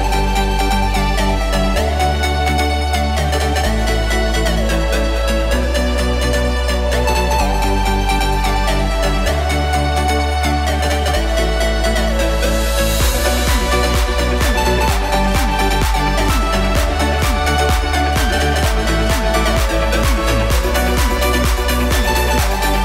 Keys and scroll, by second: 21.2 shift+w, 21.8 alt+shift+w.